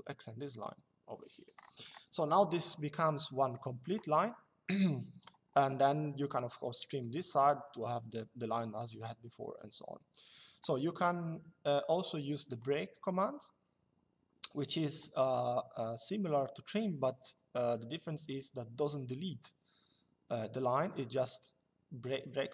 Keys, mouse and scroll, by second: 1.8 Escape, 2.3 click, 6.0 click, 12.3 click.